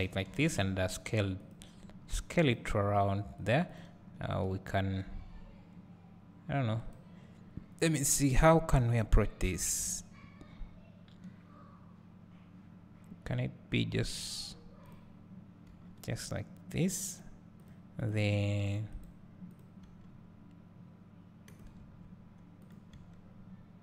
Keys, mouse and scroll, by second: 0.3 s, 1.8 g, 2.5 click, 2.7 s, 3.7 click, 4.0 g, 7.7-8.1 scroll down 1, 8.1-14.8 scroll up 1, 14.8 click, 15.7 g, 17.6 click, 18.0 click, 18.4 g, 19.0 right click, 19.5 click, 19.8 g, 21.8 s, 22.9 g.